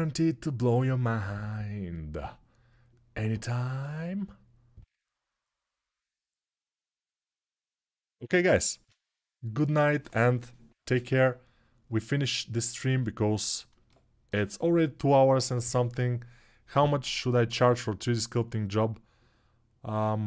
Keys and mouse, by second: 13.9-20.2 alt+shift+drag, 13.9-20.2 alt+shift+middle drag, 13.9-20.2 alt+shift+right drag.